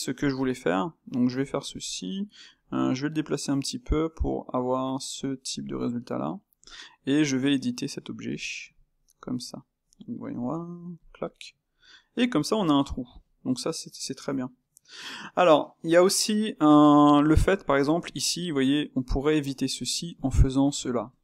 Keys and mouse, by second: 0.1 click, 0.7 s, 2.6 g, 5.7-7.3 middle drag, 7.3 Tab, 8.1 click, 8.3 middle click, 8.9 shift+click, 9.2-10.4 middle drag, 10.4 g, 11.0 middle click, 11.9 Tab, 12.2-20.1 middle drag, 20.1 click, 20.4-21.0 ctrl+middle drag, 21.0 Tab.